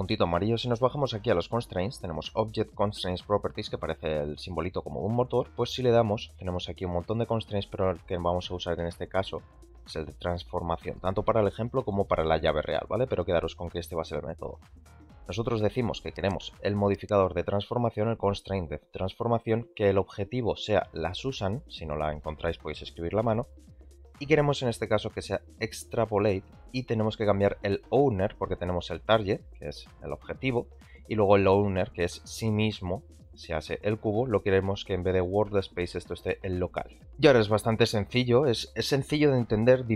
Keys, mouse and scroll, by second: 6.9-14.6 drag, 25.9 click, 29.3 click, 30.3 click, 31.3-31.6 drag, 32.3 click, 33.2 click, 34.6-37.0 drag, 37.1-37.4 middle drag.